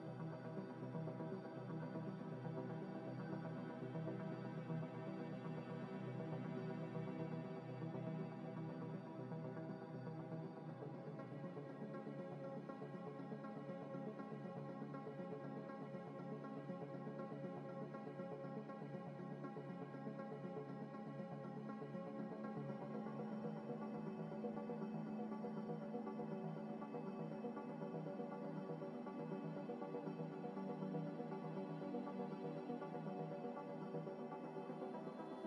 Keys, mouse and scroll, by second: 1.1 ctrl+z, 1.6 Delete, 2.1 Delete, 2.2 scroll down 1, 2.4 middle click, 2.8 scroll down 1, 3.0 middle click, 4.4 scroll up 1, 4.7 middle click, 5.4 scroll up 1, 5.8 middle click, 6.9 shift+click, 7.4 g, 7.6 y, 8.1 x, 10.2 scroll down 1, 11.3 middle click, 11.6 scroll down 1, 12.7 z, 13.3 double click, 14.0 ctrl+c, 15.7 ctrl+n, 17.1 ctrl+v, 17.5 s, 19.0 s, 19.4 g, 19.5 y, 20.0 z, 20.6 scroll up 1, 23.2 double click, 25.8 z, 26.0 z, 26.6 Tab, 26.9 Tab, 28.4 scroll down 1, 29.4 Delete, 30.0 scroll up 1, 30.5 shift+a, 33.2 g, 33.2 z, 34.8-35.4 typing.